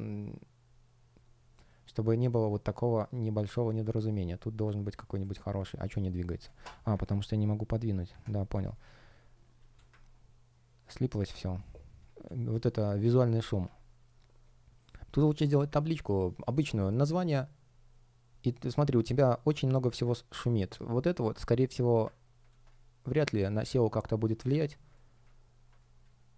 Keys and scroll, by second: 6.9 super+\, 8.0 super+\, 8.4 space, 11.3 shift+0, 22.4 space, 24.8 space, 25.7 space.